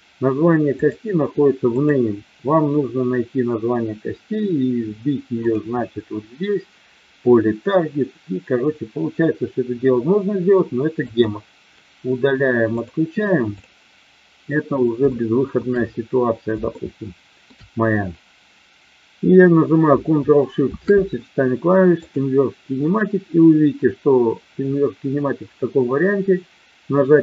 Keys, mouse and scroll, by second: 1.8 click, 5.4 click, 11.0 click, 13.5 click, 15.0-15.7 shift+middle drag, 16.8-17.5 shift+middle drag.